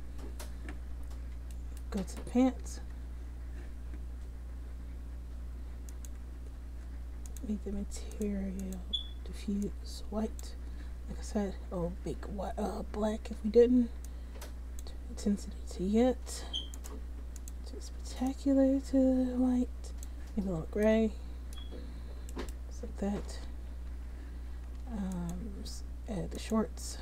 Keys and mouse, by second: 1.7 click, 2.7 Tab, 11.1 Tab, 11.8 Tab, 12.2 Tab, 12.7 Tab, 13.5 Tab, 21.1-24.9 drag, 23.0 Tab, 23.6 a, 24.0 a, 24.9 a, 25.2 click.